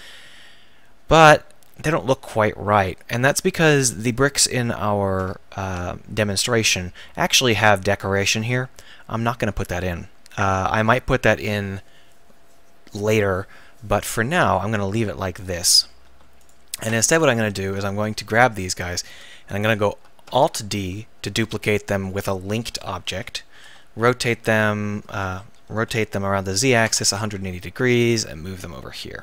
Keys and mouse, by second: 16.4-17.8 right drag, 17.8 KP_1, 20.2 alt+d, 20.9 click, 22.5 r, 25.8 r, 27.9-29.2 drag.